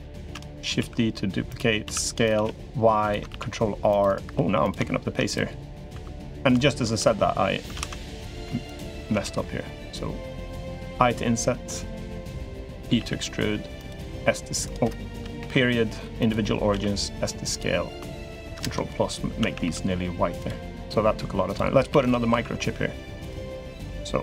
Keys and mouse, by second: 0.0 shift+d, 0.5 s, 1.6 s, 3.1 ctrl+r, 4.1 3, 4.4 click, 5.1 click, 5.8 2, 6.3 shift+click, 6.8 3, 7.5 alt+z, 7.9 click, 8.4 shift+click, 8.9 alt+z, 10.7 i, 12.6 e, 13.9 s, 15.2 ., 16.5 s, 18.3 ctrl+KP_Add, 19.2 a, 19.4 g, 21.3 click, 21.7 shift+d, 22.1 s, 24.1 click.